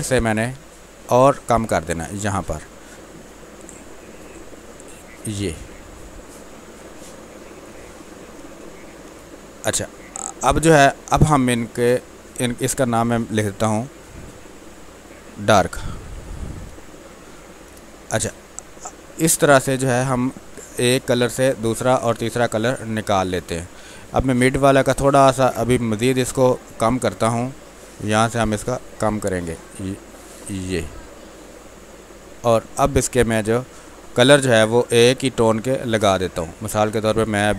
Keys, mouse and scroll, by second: 6.9 space, 7.8 click, 7.9 space, 9.0 space, 9.3 ctrl+click, 10.1-11.9 drag, 15.5 shift+d, 17.6 Return, 20.5 space, 21.0 ctrl+click, 22.4-24.1 drag, 25.8 ctrl+m, 27.6-30.2 drag, 30.5-31.8 drag, 33.4 space, 33.8 click, 33.9 space, 35.3-37.5 drag.